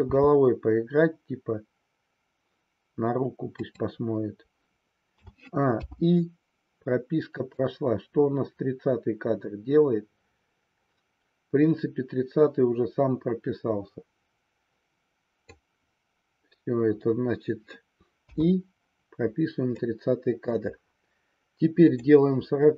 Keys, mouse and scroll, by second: 0.4 r, 5.2 a, 5.8 i, 7.6-15.6 drag, 19.8 middle click, 21.8 click.